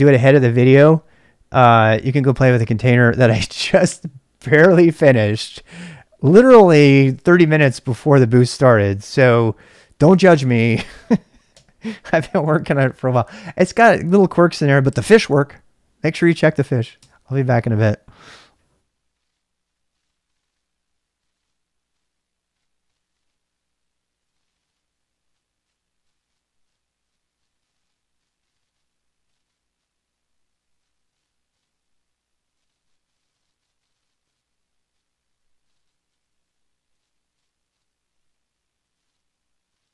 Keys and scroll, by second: 11.5 ctrl+c, 12.0-13.2 typing, 16.9 typing, 17.1 Return.